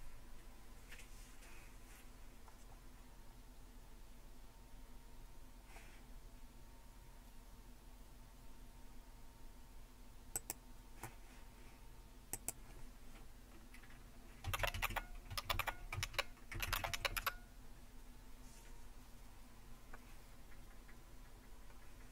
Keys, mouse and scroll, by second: 10.4-13.6 drag, 14.3-17.4 typing.